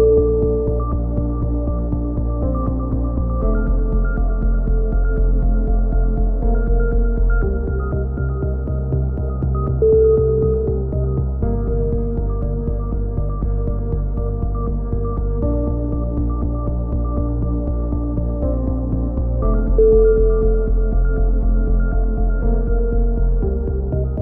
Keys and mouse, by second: 0.9 g, 2.6 a, 3.0 z, 3.2 click, 3.4 right click, 4.3 right click, 4.7 click, 5.1 a, 5.1 z, 5.3 click, 5.8 click, 5.9 KP_7, 6.1 z, 7.5 click, 7.9 ctrl+z, 8.1 ctrl+z, 8.3 right click, 8.6 click, 9.1 click, 9.5 a, 9.8 z, 10.1 click, 10.7-13.7 drag, 13.7 KP_3, 13.9 z, 14.4 click, 16.1 right click, 16.6 KP_3, 17.1 click, 18.1 click, 18.1 a, 18.3 z, 18.6 z, 19.6 click, 19.6 right click, 20.3 click, 20.5 a, 20.5 z, 20.6 middle click, 20.6 z, 22.0 KP_1, 22.1 z, 22.4 click, 23.1 right click, 23.7 g.